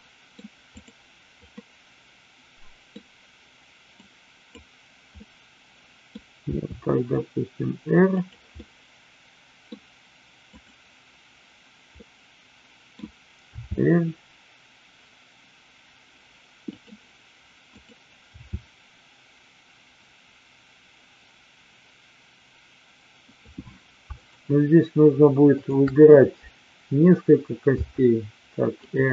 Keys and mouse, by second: 0.0 middle drag, 1.7-3.0 middle drag, 4.0-4.6 drag, 5.2-6.0 middle drag, 6.5 r, 8.6-9.7 middle drag, 10.5-11.5 drag, 12.1-12.8 middle drag, 13.5 r, 17.7-18.7 drag, 18.8 r, 24.2-25.1 shift+drag, 25.5 shift+click, 27.7 r, 28.8 click.